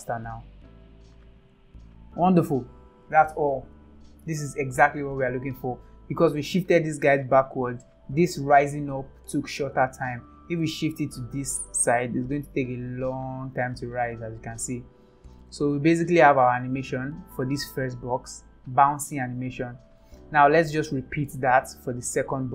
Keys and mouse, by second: 0.2 space, 1.4 click, 2.4 click, 3.0 space, 5.2 click, 6.1 click, 10.5 g, 12.5 click, 12.6 space, 13.5 space, 14.7 ctrl+z, 15.8 ctrl+z, 17.3 space, 19.2-19.8 drag, 19.8 space, 20.9 ctrl+s.